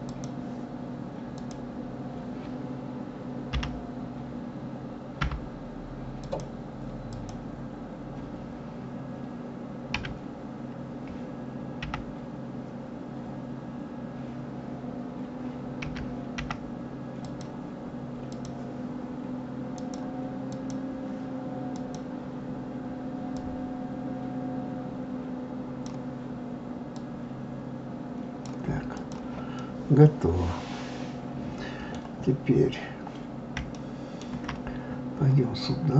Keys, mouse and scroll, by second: 3.4 l, 7.1 click, 9.9 s, 18.3 click, 19.7-21.9 drag, 23.4-26.4 drag, 26.9-29.1 drag, 29.6-32.3 middle drag, 32.3-32.9 scroll up 4, 33.1 scroll down 2, 33.7-35.6 shift+middle drag, 35.6 scroll up 2.